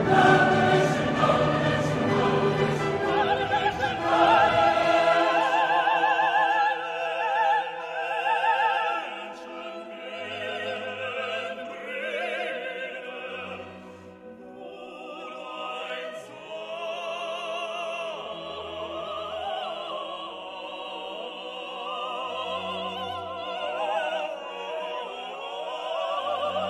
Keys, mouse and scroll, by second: 0.0 click, 2.9 click, 3.9 click, 4.9 right click, 5.6 click, 6.7 click, 7.7 click, 9.6 click, 11.1-12.5 drag, 12.9 middle click, 13.9 click, 15.1 click, 16.5 click, 18.2 click, 19.6 middle click, 20.6 click, 21.3 click, 22.3 click, 23.9-24.3 scroll down 2.